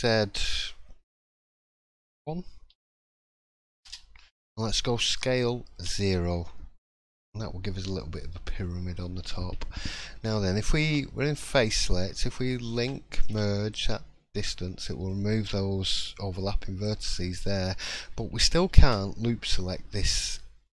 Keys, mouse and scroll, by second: 8.5 middle click, 9.3 scroll up 1, 9.8 shift+middle click, 10.8 3, 12.7 l, 14.4 middle click, 14.4 m, 16.8 click, 17.2 shift+middle click, 18.5 ctrl+r.